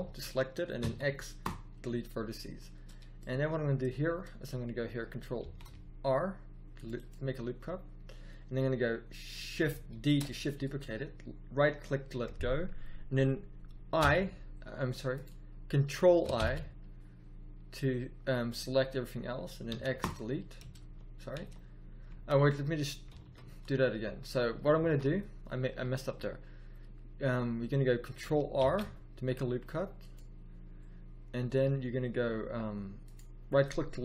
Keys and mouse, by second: 0.8 x, 5.3 ctrl+r, 9.8 shift+d, 13.9 o, 13.9 i, 16.3 ctrl+i, 19.7 x, 20.7 ctrl+z, 21.3 ctrl+z, 22.0 ctrl+z, 23.0 ctrl+z, 24.8 ctrl+z, 28.5 ctrl+r.